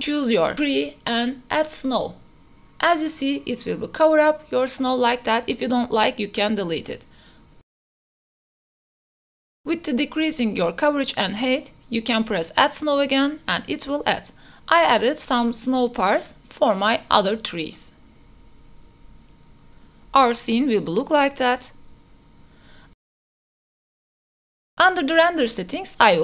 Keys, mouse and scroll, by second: 0.0 n, 0.3 n, 0.5-3.5 drag, 3.3 middle click, 3.7 middle click, 4.3 a, 4.5 middle click, 4.5 a, 4.8 drag, 5.2-6.1 middle drag, 6.4 a, 6.5 a, 6.7 KP_0, 7.5 click, 8.0 x, 9.6-10.9 drag, 11.0 click, 12.1 click, 12.8 middle click, 13.2 middle click, 13.2 a, 13.9 shift+middle click, 14.1-14.5 drag, 14.8 shift+middle click, 15.0 middle drag, 15.2 shift+middle click, 16.0 click, 16.4 click, 16.6 drag, 16.9 drag, 17.6 click, 17.8 shift+click, 18.2 middle click, 18.3 shift+middle click, 18.9 middle click, 19.2 middle click, 19.4-19.8 drag, 19.4-19.8 right drag, 19.9 middle click, 20.7 click, 20.9 n, 23.8 a, 24.6 click, 24.6 a, 25.0-26.1 drag.